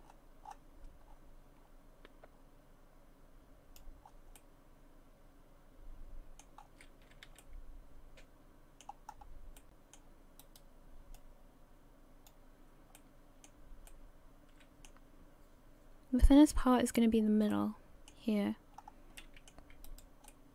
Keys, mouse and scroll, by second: 4.0-4.4 scroll down 4, 4.4 middle click, 6.6-7.1 scroll up 3, 7.1 a, 7.3 a, 7.4 middle click, 8.9-9.7 scroll up 3, 9.6 middle click, 10.7 right click, 11.1 click, 13.0 middle click, 13.9 middle click, 17.2-17.5 scroll down 3, 17.5 middle click, 18.7-19.2 scroll up 3, 19.2 middle click, 19.9 right click, 20.3 middle click.